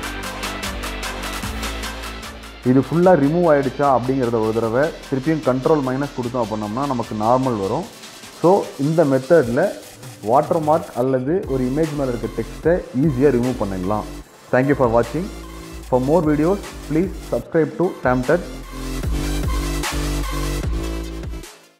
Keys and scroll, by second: 7.6 ctrl+space, 18.1 ctrl+space.